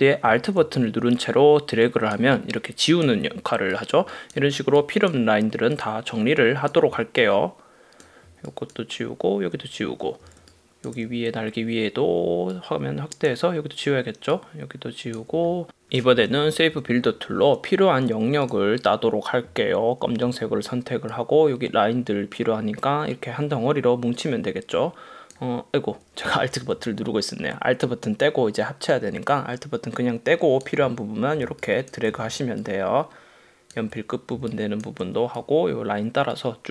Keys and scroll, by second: 10.4 space, 11.0 super+space, 16.6 super+-, 26.6 super+z, 31.5 space, 32.0 super+space, 34.5 space.